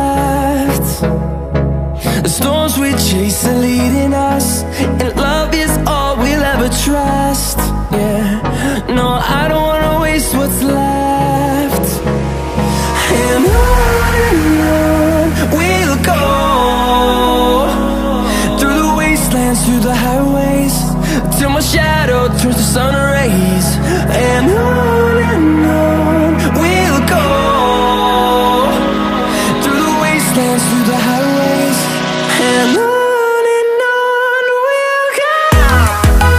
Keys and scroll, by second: 0.9 Up, 6.0 Left, 6.4 1, 6.8 0, 7.1 2, 7.5 4, 30.4 s, 30.7 h, 32.5 o, 33.3 b, 34.0 i.